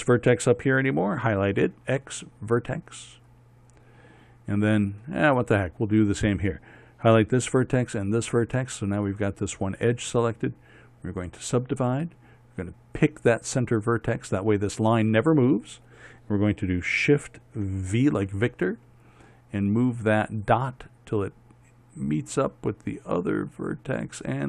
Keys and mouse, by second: 2.3 x, 3.6-5.5 middle drag, 5.5-7.9 drag, 16.4-18.5 drag, 18.5 shift+v.